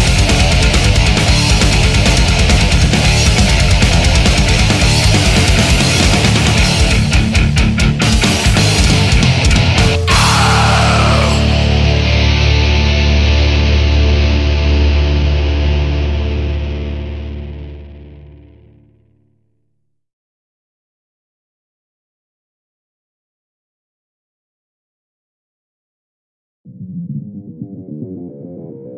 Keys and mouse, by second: 3.2 right click, 7.9 e, 8.8 right click, 13.6 right click, 20.3 right click, 20.6 right click, 21.7 right click, 23.3 right click, 24.4 right click, 26.2 right click, 28.0 right click, 28.3 right click, 28.5 right click.